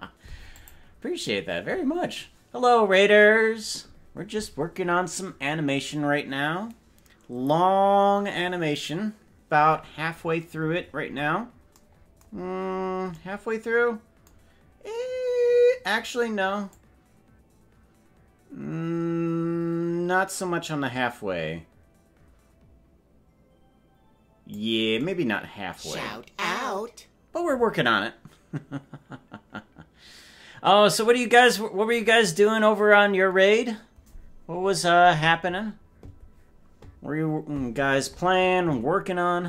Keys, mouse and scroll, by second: 9.9-11.5 scroll down 35, 12.5-13.1 scroll down 3, 16.8-24.7 drag.